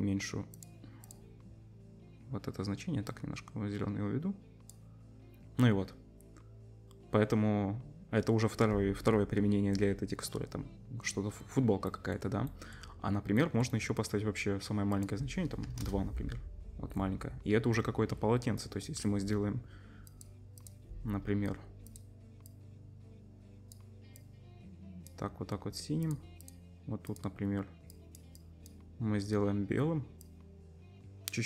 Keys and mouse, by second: 1.1-14.9 drag, 14.9-20.6 middle drag, 20.6-21.9 drag, 21.9 middle click, 21.9-26.0 drag, 26.5-30.2 drag.